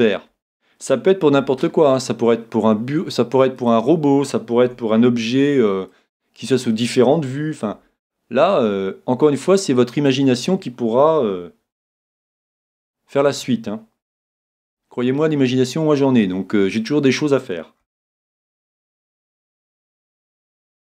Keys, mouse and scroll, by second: 1.4 s, 3.7-5.5 drag, 4.6 a, 5.1 b, 7.7 s, 10.1-11.8 drag, 11.2 a, 11.8 b, 14.3 s, 16.9-18.8 drag, 17.8 a, 18.4 b, 20.8 s.